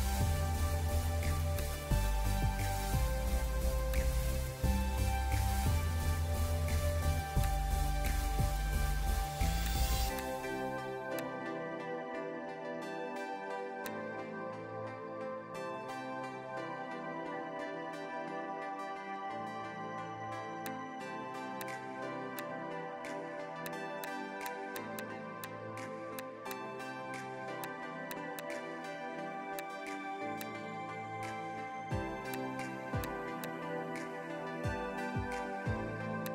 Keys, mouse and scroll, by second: 2.4 ctrl+b, 14.3 scroll up 1, 15.9 b, 17.5 [, 17.7 [, 24.9 double click, 29.4 space, 32.1 space, 35.8 x.